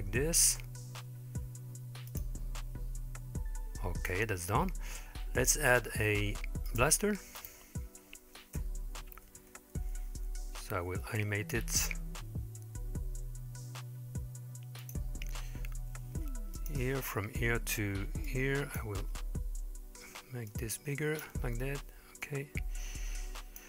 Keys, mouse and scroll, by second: 6.7-7.0 drag, 7.4 drag, 8.6 KP_1, 9.0 KP_3, 9.4 KP_5, 10.7 g, 15.8 i, 18.3-18.8 drag, 20.5 click, 22.3 click.